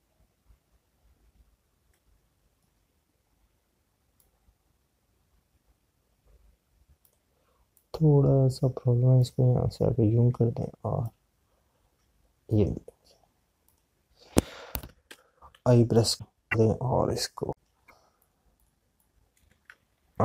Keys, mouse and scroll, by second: 5.1 click, 16.9 click.